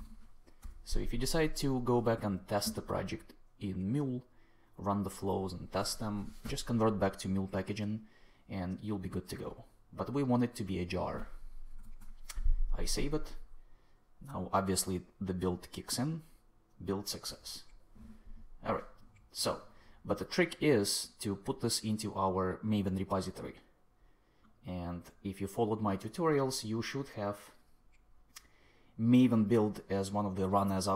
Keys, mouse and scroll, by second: 0.0-1.0 typing, 11.7 super+s.